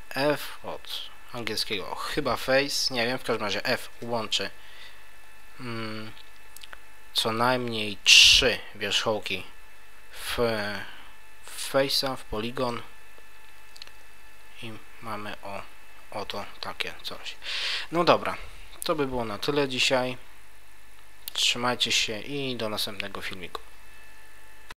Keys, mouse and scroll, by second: 3.9 f, 11.8 scroll up 1, 12.2 Tab, 12.7 middle click, 16.6-18.2 scroll down 1.